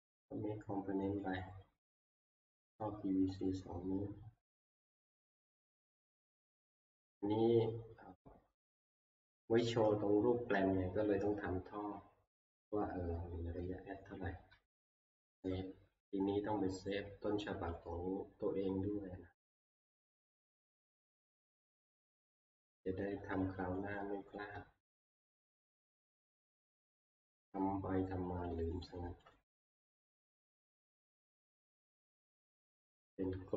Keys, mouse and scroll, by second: 1.4 click, 3.5 click, 5.6 click, 9.0 click, 9.8-10.7 scroll, 10.0 middle click, 10.1-12.3 middle click, 12.6 middle click, 14.0 shift+middle click, 15.0 ctrl+s, 17.8 click, 20.3 click, 20.6 middle click, 20.7 middle click, 22.0 shift+middle click, 22.1 shift+middle click, 22.5 shift+middle click, 22.6 shift+middle click, 22.8-29.0 shift+middle click, 23.1 shift+scroll, 24.0 shift+scroll, 24.6-25.1 shift+scroll, 25.4 shift+scroll, 25.7 middle click, 25.8 middle click, 25.9 middle click, 26.2 middle click, 26.6 middle click, 26.7 middle click, 26.9 scroll, 29.0 click, 29.3 click, 30.3 ctrl+q.